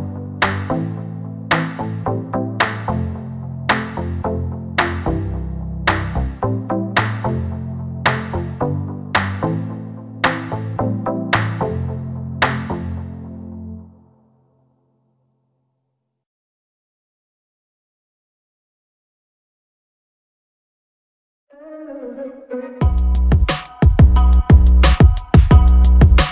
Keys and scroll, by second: 0.0 space, 0.1 Escape, 1.8 r, 4.5-6.6 typing, 9.7 space.